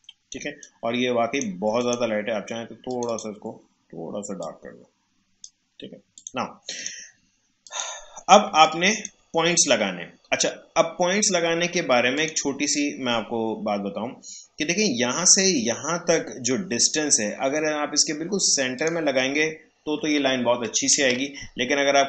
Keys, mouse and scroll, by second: 0.3 space, 0.6 click, 0.8 space, 1.8-6.1 drag, 8.4 space, 8.6 click, 9.0 space, 12.1 click, 18.7 click, 21.0 ctrl+z.